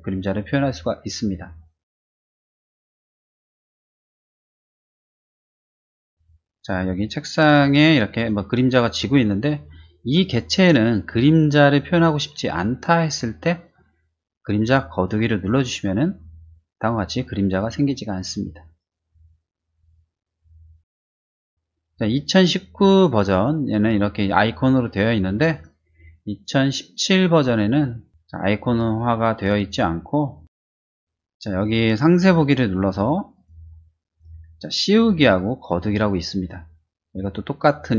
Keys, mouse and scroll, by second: 2.8 middle click, 3.6-4.6 drag, 5.0-6.2 drag, 7.4 click, 8.1 click, 8.7 click, 15.3 click, 21.1 middle click, 25.5 click, 26.4 click, 27.2 click, 27.9 click, 28.2 click, 28.6 middle click, 29.4 middle click.